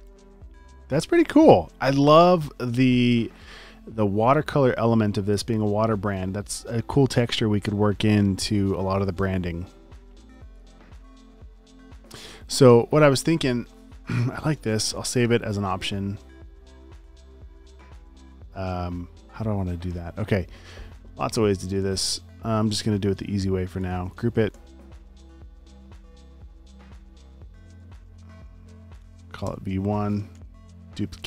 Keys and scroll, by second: 14.7 super+s, 24.1 super+g, 24.5 shift+super+e, 26.7 super+z, 27.8 shift+super+r, 28.3-29.5 typing, 30.3 super+j.